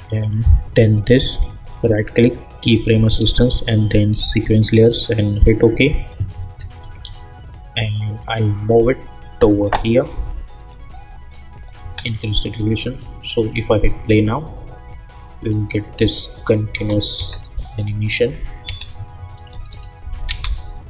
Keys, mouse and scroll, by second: 1.1 shift+click, 1.6 right click, 2.7 click, 6.8 -, 7.0 -, 8.3-11.8 drag, 11.8 space, 16.7 space, 19.5 =, 19.6 =, 20.2 space.